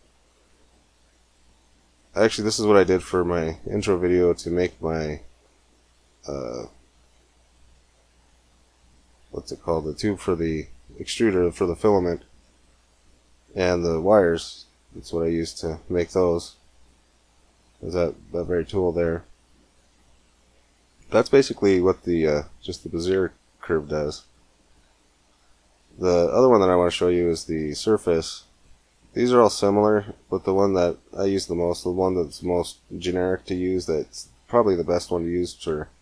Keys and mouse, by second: 0.2 middle click, 3.1 Tab, 4.0-5.5 middle drag, 8.6-14.1 middle drag, 22.9 x, 24.6 shift+a.